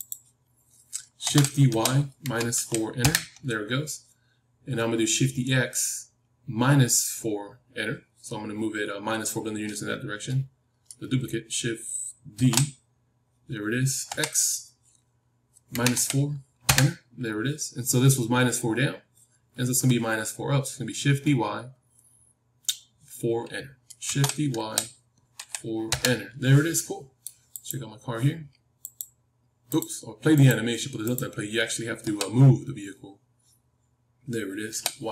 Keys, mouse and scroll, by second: 1.1 shift+d, 3.7-6.2 middle drag, 12.3 shift+d, 24.0 shift+d, 26.7-28.9 middle drag, 27.6-34.1 drag, 32.0 g.